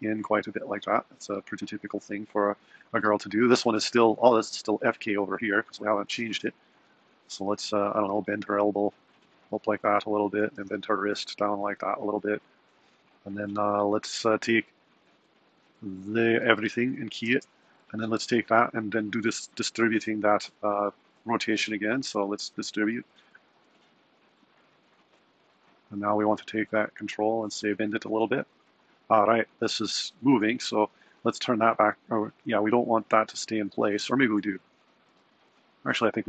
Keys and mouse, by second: 3.6 click, 5.6 r, 7.1 click, 7.6 r, 10.0 click, 10.5 r, 16.7 a, 17.2 i, 18.1 click, 22.6-25.1 drag, 26.0 click, 26.6 r, 30.2 click, 33.9 click, 34.5 r.